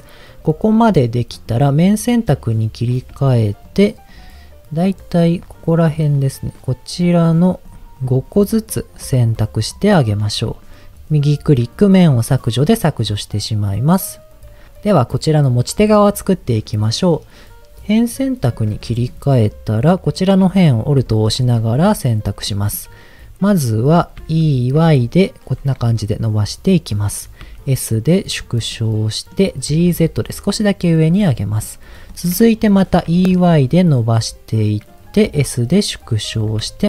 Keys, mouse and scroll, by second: 1.3 click, 2.0 middle click, 2.7 click, 3.3 shift+click, 3.6 shift+click, 4.8 shift+click, 5.3 shift+click, 5.6 shift+click, 6.0 shift+click, 7.2 shift+click, 7.6 shift+click, 7.9 shift+click, 8.4 shift+click, 8.9 shift+click, 9.3 shift+click, 9.7 shift+click, 10.0 shift+click, 11.2-13.0 right drag, 13.0 middle click, 14.1-14.7 scroll down 2, 18.1 click, 18.7 middle click, 20.0 alt+click, 20.7 scroll up 1, 21.0 shift+middle click, 21.3-21.6 scroll up 3, 22.4 middle click, 24.2 e, 24.9 y, 27.0 click, 27.4 s, 28.4 click, 28.7 middle click, 29.7 g, 29.9 z, 30.9 click, 31.2 middle click, 32.1 middle click, 33.1 e, 33.3 y, 34.8 click, 35.3 s, 36.3 click, 36.6 middle click.